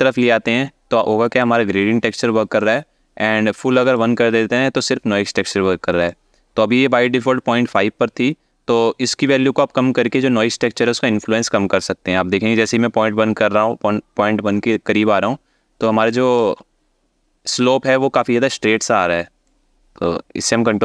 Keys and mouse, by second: 2.3-3.6 drag, 5.8-16.0 drag, 19.1-20.8 ctrl+drag.